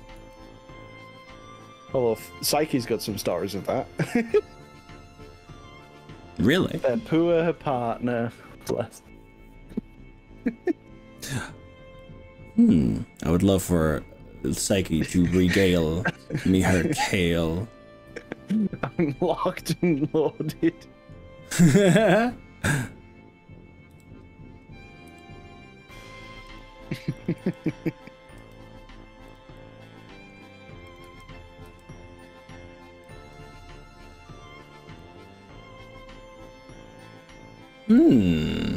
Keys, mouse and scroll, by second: 0.2 z, 2.2 click, 2.7 middle click, 4.6-6.8 middle drag, 6.8 click, 12.0-21.1 middle drag, 21.1 click, 21.9 click, 24.0 g, 25.1 g, 26.6 click, 27.2 click, 27.4 g, 28.4 g, 29.4 click, 29.6 middle click, 31.0 click, 31.2 g, 31.8 g, 33.2 click, 33.4 middle click, 34.3-35.0 scroll down 4, 35.0-38.7 middle drag.